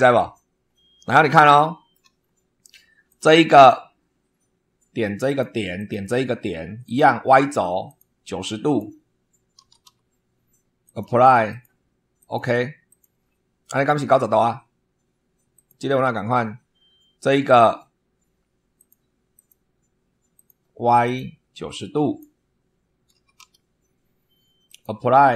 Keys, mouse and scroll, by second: 0.3-0.8 scroll down 4, 1.5 shift+middle click, 2.1 shift+scroll down 1, 3.0 click, 5.2 click, 5.7 click, 6.8 click, 7.8 click, 8.4 click, 9.5 9, 9.8 0, 10.8 click, 11.4 click, 12.1 click, 12.8 click, 15.5 click, 18.7 click, 19.3 click, 20.3 click, 21.0 click, 21.7 click, 23.1 9, 23.3 0, 24.6 click.